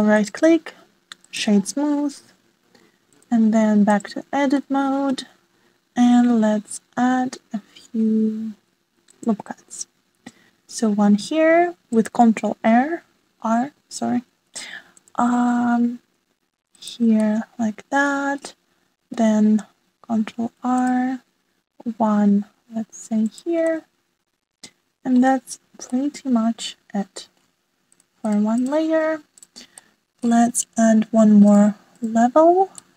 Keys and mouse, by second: 1.7-2.6 drag, 3.2 middle click, 5.0 ctrl+r, 12.0 ctrl+r, 15.8-17.8 middle drag, 18.9 ctrl+r, 22.2-23.9 middle drag, 24.5 shift+middle click, 25.3 shift+middle click, 26.5 click, 26.8 click, 27.9 click, 28.4 middle click, 30.0 click, 31.4-31.7 shift+middle drag, 31.9-32.9 middle drag.